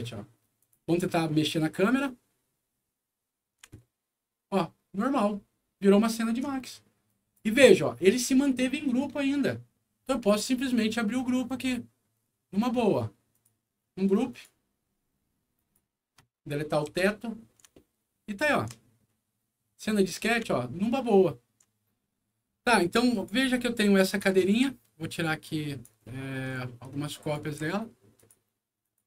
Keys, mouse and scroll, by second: 0.6 click, 1.2-3.4 middle drag, 3.7-6.3 alt+middle drag, 7.0 alt+click, 11.4 click, 13.3 click, 14.3 click, 15.5 click, 16.8 Delete, 17.7 alt+middle click, 19.0 alt+middle click, 19.9 alt+scroll up 1, 20.5-21.5 alt+middle drag, 21.8 alt+scroll down 2, 21.9 middle click, 22.6 scroll down 2, 23.0 click, 23.5 middle click, 24.4 w, 25.4 click, 26.0 middle click, 27.0 shift+click, 28.1 shift+click, 28.8 shift+click.